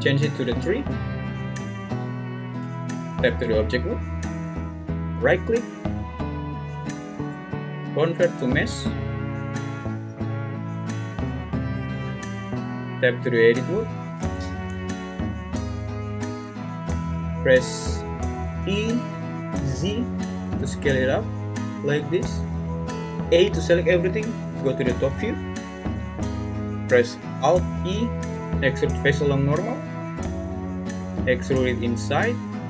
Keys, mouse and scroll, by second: 2.6 Tab, 5.7-9.6 right drag, 11.2 Tab, 14.2 a, 16.2 `, 18.7 e, 19.5 z, 23.3 a, 24.5 `, 27.7 alt+e.